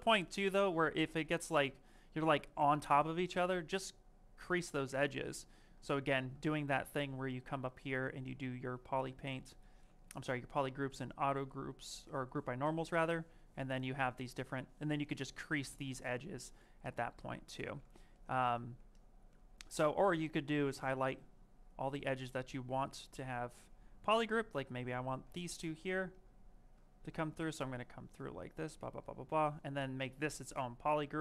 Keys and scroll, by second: 0.1 ctrl+z, 5.9 ctrl+z, 25.1 ctrl+z, 30.2 space.